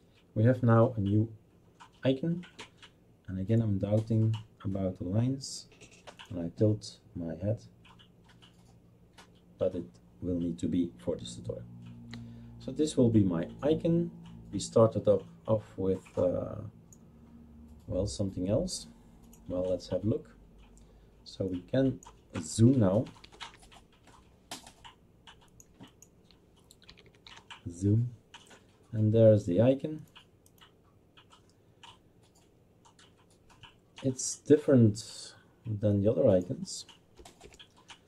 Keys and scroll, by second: 22.5-23.9 typing, 26.6-27.8 typing, 37.2 BackSpace, 37.4 Return.